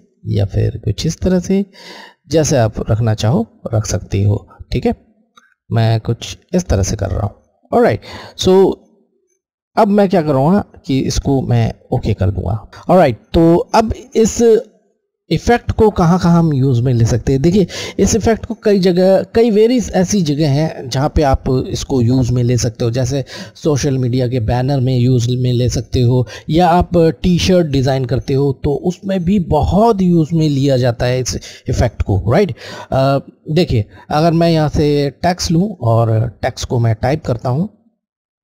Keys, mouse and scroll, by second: 11.9 click, 12.0 click, 34.8 click, 34.9 click.